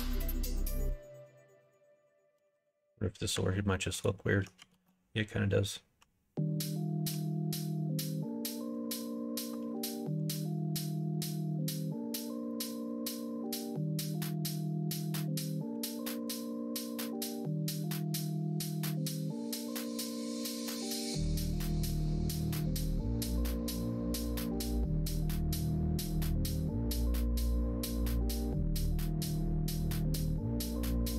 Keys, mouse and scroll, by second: 1.0 3, 2.3 KP_1, 2.5 KP_3, 4.7 ctrl+z, 7.1 e, 10.3 r, 12.5 middle click, 13.5 g, 15.7 2, 16.7 click, 17.9 click, 19.2 g, 20.5 middle click, 23.5 3, 23.7 click, 24.4 shift+click, 25.0 KP_1, 25.3 KP_3, 26.9 e, 28.7 s, 31.0 ctrl+z.